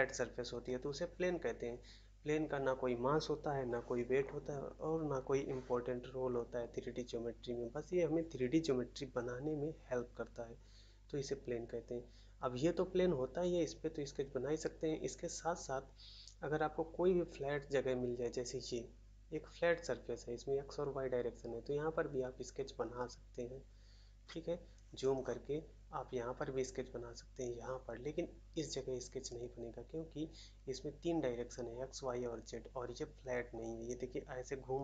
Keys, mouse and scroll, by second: 0.4 shift+a, 25.2-25.8 scroll down 1, 27.6 scroll up 1.